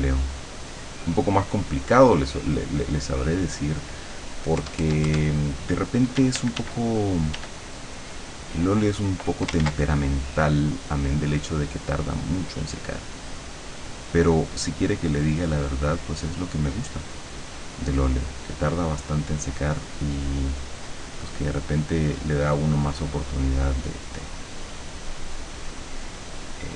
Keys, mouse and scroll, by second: 0.2 ctrl+click, 4.6 KP_Add, 6.2 d, 7.4 d, 7.8-9.4 drag, 9.6 ctrl+z, 10.2-12.8 ctrl+drag, 13.2-14.3 drag, 15.1-17.4 drag, 22.8 click.